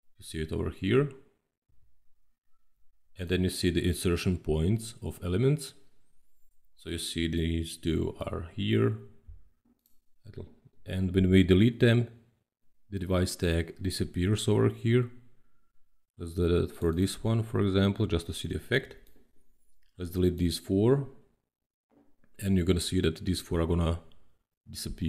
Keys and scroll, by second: 1.6 i, 9.0 Delete.